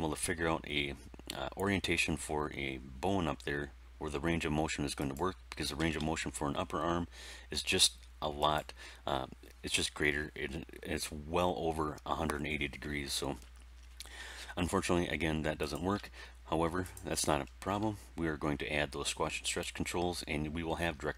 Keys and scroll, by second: 5.7 r.